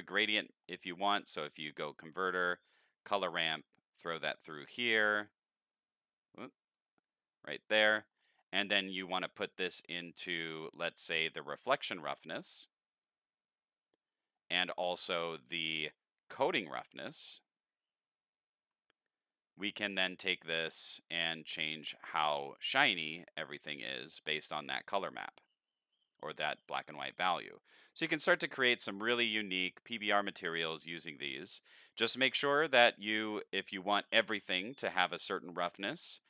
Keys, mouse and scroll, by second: 0.6 middle click, 0.8 shift+middle click, 1.0 shift+a, 1.7 click, 3.0 click, 3.9-4.6 drag, 5.7-6.7 drag, 7.3 middle click, 9.1-13.0 drag, 14.6-17.2 drag, 20.0 click, 20.7 click, 21.6 click, 23.2 click, 26.7 middle click, 28.5 middle click, 30.1-32.5 drag, 32.9-33.4 middle drag, 33.7-34.2 drag, 34.5 middle click.